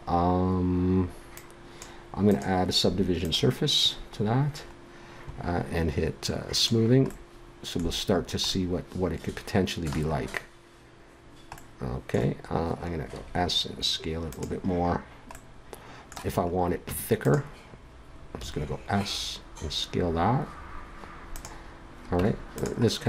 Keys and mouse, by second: 1.3-3.1 drag, 3.8-4.8 drag, 4.8-6.5 middle drag, 6.5-8.3 drag, 9.1 middle click, 10.2-11.6 middle drag, 13.2 s, 16.9 Tab, 18.4 s, 22.2 Tab.